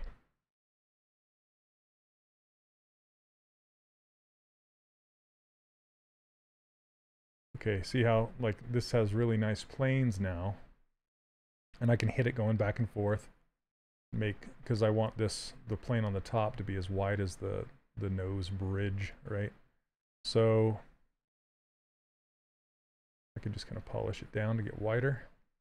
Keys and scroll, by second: 1.9 s.